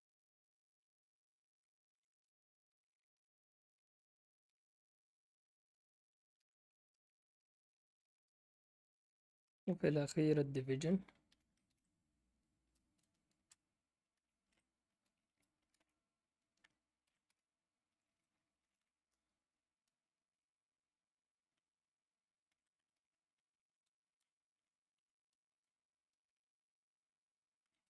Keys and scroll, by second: 1.6-4.9 typing, 6.1-8.1 typing, 9.5 BackSpace, 11.2-12.1 typing, 13.3-15.7 typing, 17.0 typing, 17.2 Return, 18.4-20.7 typing, 22.0-22.9 typing, 24.0-26.2 typing, 27.7-27.8 typing.